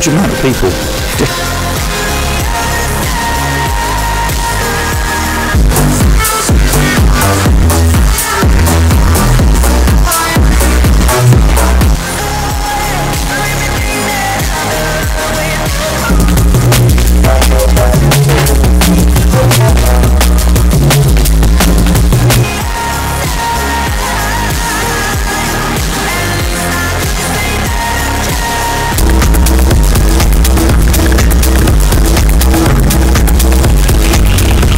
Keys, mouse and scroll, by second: 1.1 Page_Down, 11.9 Page_Down, 22.3 Page_Down.